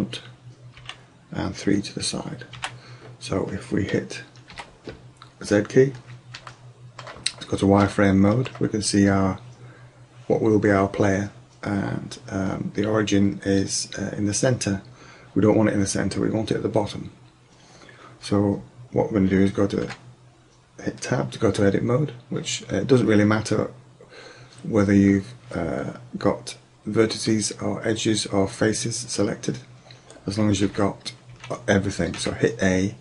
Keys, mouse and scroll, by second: 0.8 KP_3, 2.6 KP_1, 4.6 z, 6.6 middle click, 6.9 middle click, 8.5-10.2 drag, 19.9 Tab, 30.7 a, 31.4 a, 32.2 a.